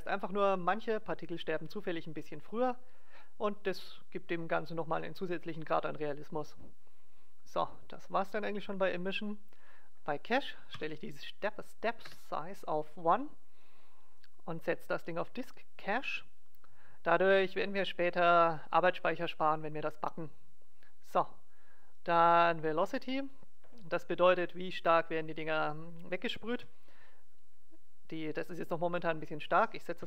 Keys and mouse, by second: 8.5-11.7 drag, 14.6-17.3 drag, 20.8-22.5 drag, 23.2-24.6 drag, 23.9 alt+a, 26.5 alt+a.